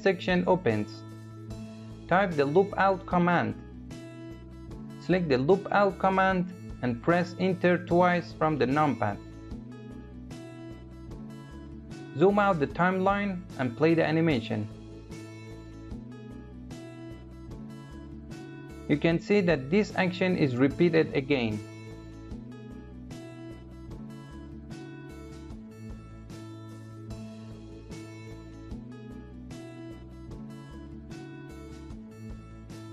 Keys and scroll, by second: 6.7 Return.